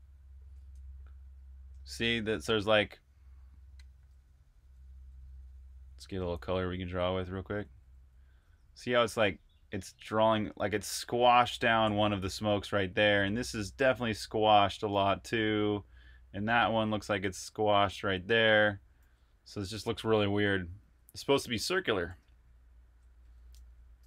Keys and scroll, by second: 2.9 typing, 4.1 typing, 7.4-8.5 typing, 12.1 super+z, 18.9 super+z, 21.5 super+z, 21.9 super+Tab, 23.8-24.0 typing.